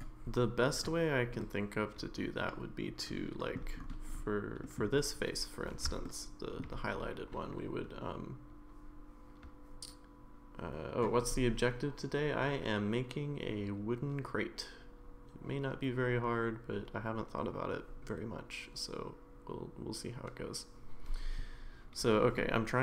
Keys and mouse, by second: 1.4-3.6 middle drag, 4.6 middle click, 6.1 shift+middle click.